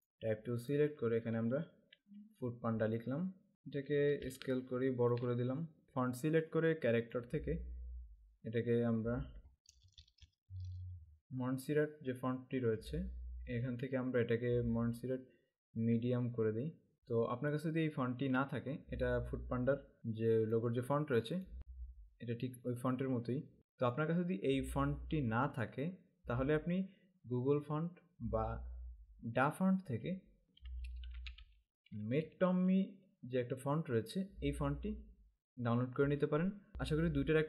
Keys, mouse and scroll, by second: 0.0 space, 0.9 click, 1.9 typing, 4.4 alt+shift+click, 5.8 click, 9.6-10.8 typing, 16.0 Down, 18.4 KP_Enter, 20.6 click, 24.0 click, 31.0-32.0 typing.